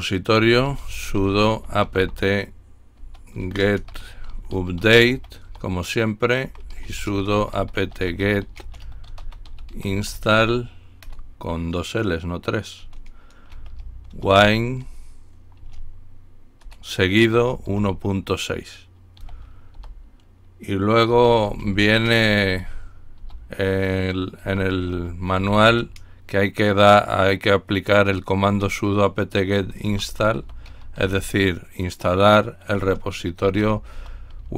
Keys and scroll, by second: 0.4-14.9 typing, 17.3 typing, 19.2-19.8 typing, 21.1-23.2 typing, 24.4-26.1 typing, 29.9-31.5 typing, 32.7-34.5 typing.